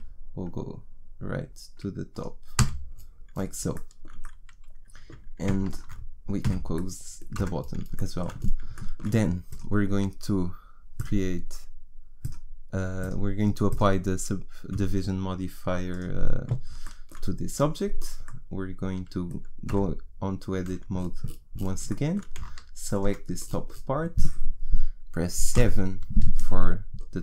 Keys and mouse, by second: 2.6 f, 5.6 right click, 6.4 right click, 6.4 f, 7.4 Tab, 9.5 middle click, 16.8-17.9 middle drag, 19.7 Tab, 23.0 right click, 23.4-25.5 middle drag, 25.5 KP_7.